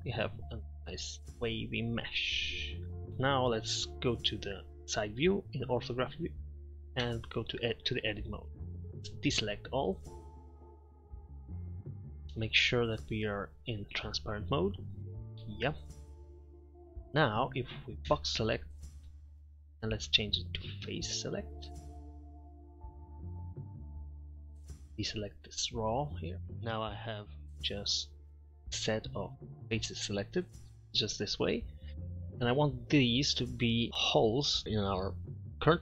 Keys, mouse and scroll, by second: 0.0 middle click, 0.1-0.5 middle drag, 1.2 Tab, 3.1-5.7 typing, 7.1 Tab, 7.8 middle click, 9.3 z, 10.9 a, 18.2 b, 20.0 click, 23.5 middle click, 24.0 middle click, 24.7 ctrl+KP_Subtract, 24.7 ctrl+z, 28.0 middle click, 31.7 middle click, 34.0 middle click.